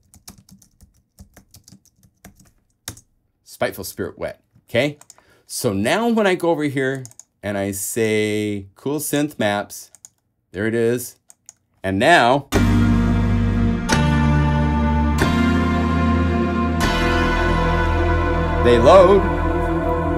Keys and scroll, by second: 0.0-3.0 typing, 3.1 shift+Return.